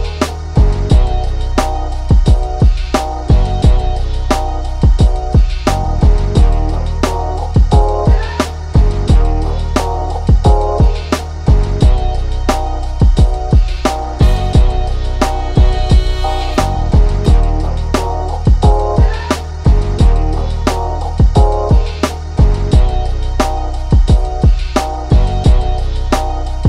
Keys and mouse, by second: 0.4 ctrl+=, 1.0-2.2 drag, 3.1-6.3 drag, 7.5 click, 8.4 click, 11.5 ctrl+z, 12.8-14.5 drag, 14.5 ctrl+z, 15.5-17.9 drag, 17.9 ctrl+z, 18.9-22.2 drag, 22.4 click, 23.1-26.2 drag, 26.2 ctrl+z.